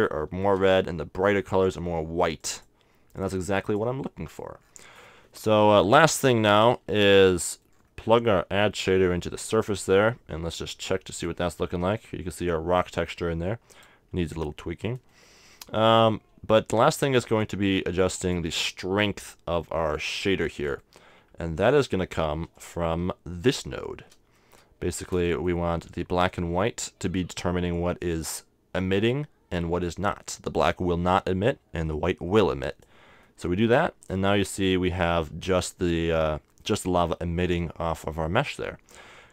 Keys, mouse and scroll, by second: 2.4-5.4 drag, 4.6-9.7 middle drag, 6.6-8.4 drag, 8.7-10.5 drag, 11.2-13.1 drag, 14.3-16.5 middle drag, 16.5-19.4 drag, 20.5-22.6 middle drag, 22.6-24.3 drag, 25.3-27.1 middle drag, 31.4 click, 33.2-34.9 middle drag, 34.0-36.0 drag, 38.8-39.3 middle drag.